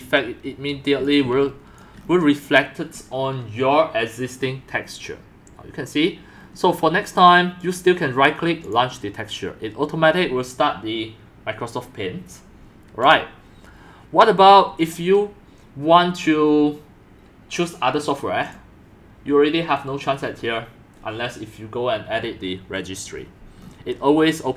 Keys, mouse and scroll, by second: 0.0 scroll, 1.0 x, 1.2 c, 1.8 click, 1.9 c, 2.0 c, 2.1 middle click, 2.2-2.6 scroll down 5, 4.4 scroll, 4.5-5.1 scroll up 5, 5.1-5.7 scroll down 2, 5.7-6.1 scroll up 1, 6.4 middle click, 6.6 middle click, 7.6-8.7 right drag, 8.7 click, 12.5-14.9 drag, 14.9-15.7 right drag, 15.7 click, 23.1 click, 23.2-24.4 middle drag, 23.2 scroll, 24.4 scroll down 3.